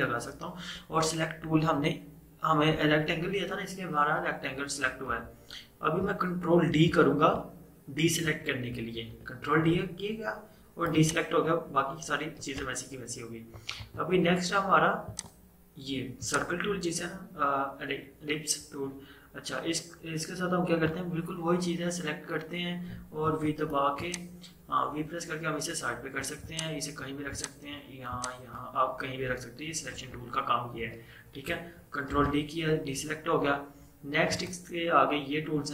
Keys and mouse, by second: 4.9 click, 5.3 ctrl+z, 8.7 ctrl+d, 11.0-12.4 drag, 12.4 ctrl+z, 13.9 right click, 15.2-23.3 drag, 23.3 v, 24.0-30.0 drag, 30.0 ctrl+z, 32.2 ctrl+d, 34.3 right click.